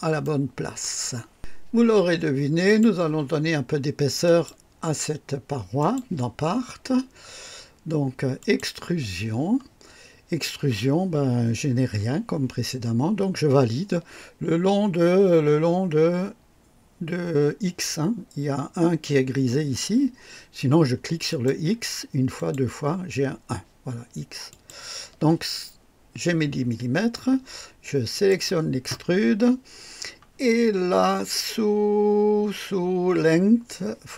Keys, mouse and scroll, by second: 0.1 right click, 2.6 click, 4.2 click, 5.8 click, 8.4 click, 21.3 click, 22.3 click, 24.5 click, 28.1 click.